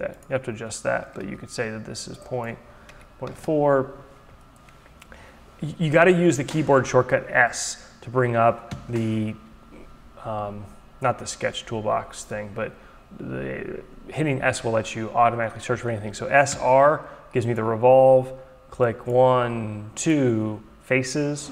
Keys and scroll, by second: 1.2 ctrl+a, 2.9 Delete, 3.3 Return, 8.2 s, 16.0 r.